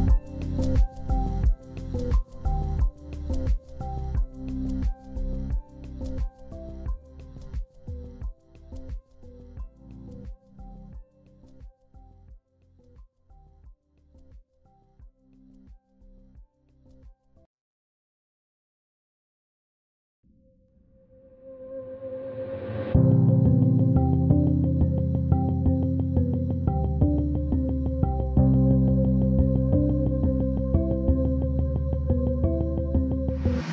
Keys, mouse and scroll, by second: 0.8 ctrl+g, 1.9 ctrl+c, 4.4 ctrl+v, 7.0 scroll down 1, 7.3 z, 8.7 ctrl+space, 11.9 ctrl+alt+click, 13.0 ctrl+alt+click, 13.9 ctrl+c, 25.3 w, 32.9 ctrl+g, 33.4 ctrl+click.